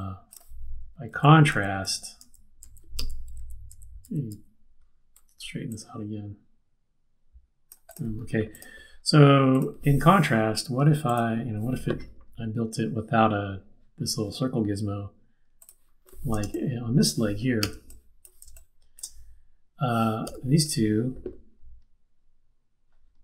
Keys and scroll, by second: 1.1 super+z, 2.2 super+z, 3.4 super+z, 4.3 super+z, 10.3 Left, 10.7 Left, 16.4 space, 17.6 z, 18.5 space, 20.2 space, 20.2 v.